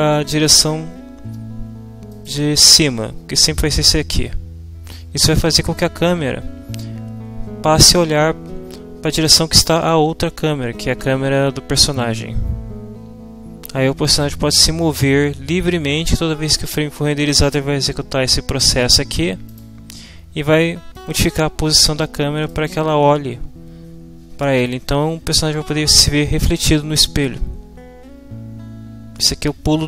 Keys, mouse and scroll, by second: 3.9-5.1 drag, 17.5-19.3 drag, 19.5 click, 20.9-22.7 middle drag.